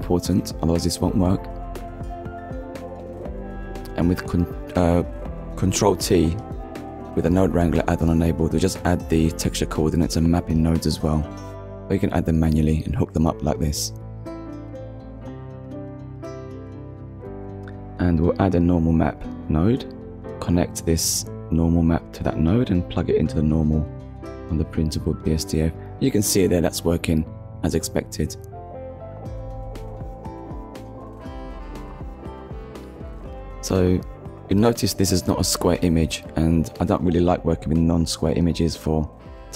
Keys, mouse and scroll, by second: 0.6 click, 1.1-1.5 scroll down 1, 1.5 middle click, 2.4 click, 3.6 ctrl+t, 4.9 click, 7.4 shift+right click, 8.4 click, 10.2 click, 11.6 shift+a, 12.4 click, 14.3 click, 15.2 click, 17.3-17.7 scroll up 1, 17.9 middle click, 18.9 click, 22.4 middle click, 23.1-23.5 scroll up 1, 24.3-24.7 scroll up 1, 25.2 middle click, 26.3-26.7 scroll down 1, 26.8-27.1 scroll down 1, 27.5 middle click, 29.2-29.6 scroll down 1, 29.9 shift+middle click, 33.2 click, 34.6-35.0 scroll down 1, 36.0 scroll down 1, 38.0 click, 39.3 click.